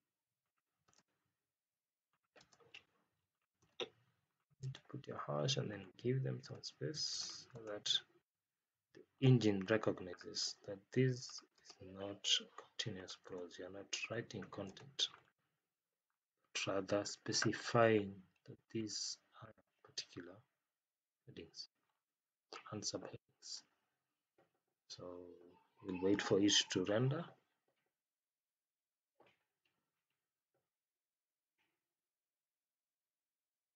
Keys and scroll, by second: 0.8 space, 2.3 space, 3.5 space, 6.4 space, 11.5 space, 13.2 space, 14.6 space.